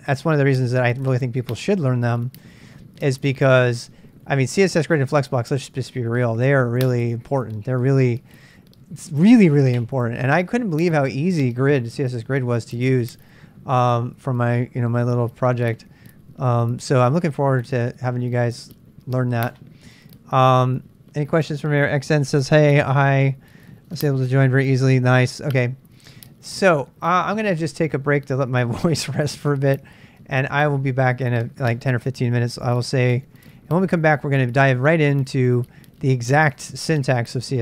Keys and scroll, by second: 33.2 super+Tab, 33.4 super+Tab.